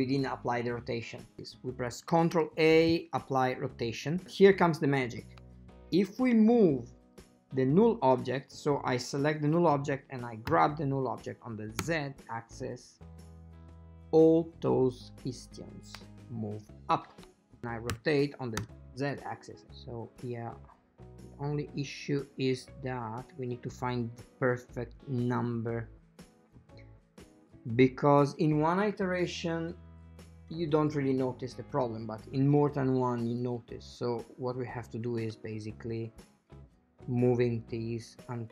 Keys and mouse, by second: 2.4 ctrl+a, 4.3 click, 7.1 shift+middle click, 11.9 g, 18.1 r, 35.2-38.5 shift+drag.